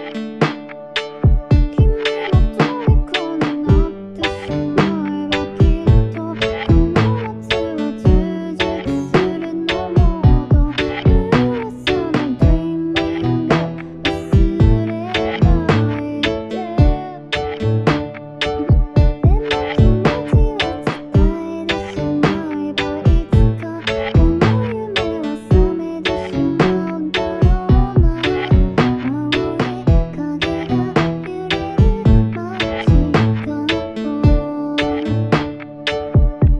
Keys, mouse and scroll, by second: 11.0 ctrl+d, 35.0 Tab.